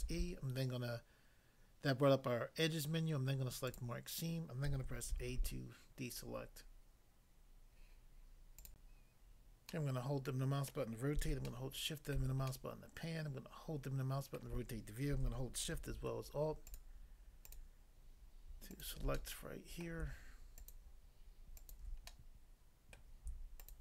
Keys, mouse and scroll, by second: 3.7 click, 3.8 click, 5.2 a, 8.7 click, 8.8 click, 9.7 middle click, 10.7 middle click, 11.5 shift+middle click, 14.3 middle click, 16.7 alt+click, 16.8 alt+click, 17.5 alt+click, 17.6 alt+click, 18.7 alt+click, 18.8 alt+click, 19.1 middle click, 19.8 middle click, 20.6 alt+click, 21.5 alt+click, 22.1 middle click, 22.9 middle click, 23.6 alt+click.